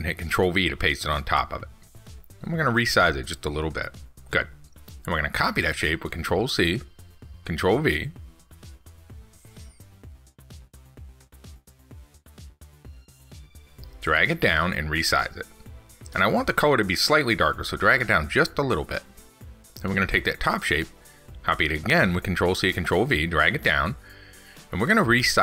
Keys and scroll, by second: 1.3 ctrl+x, 2.1 ctrl+v, 9.7 ctrl+z, 11.1 ctrl+c, 11.3 ctrl+v, 19.4 ctrl+c, 19.7 ctrl+v.